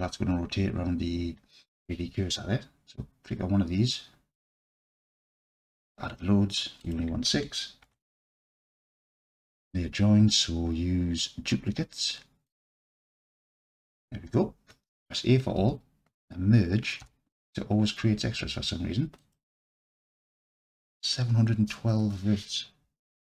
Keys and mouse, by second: 4.6 click, 6.8-9.3 drag, 12.5 click, 15.6 a, 17.0 m.